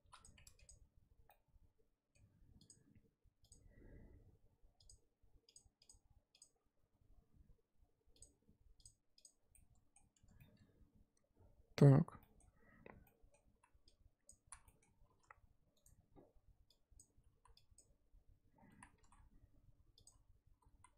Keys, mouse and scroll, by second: 0.2 p, 0.4 Tab, 0.5 click, 1.3-3.5 middle drag, 3.5-9.5 drag, 9.5 middle click, 10.1 Tab, 10.3 scroll down 1, 10.4-11.8 middle drag, 11.8-12.2 scroll up 2, 12.2 middle click, 13.0 scroll up 1, 13.0 middle click, 13.6 z, 14.2 click, 14.4 z, 14.6 middle click, 15.0 s, 17.0 click, 17.4 z, 17.7 click, 18.5 scroll down 2, 18.7 z, 18.9 s, 20.7 z.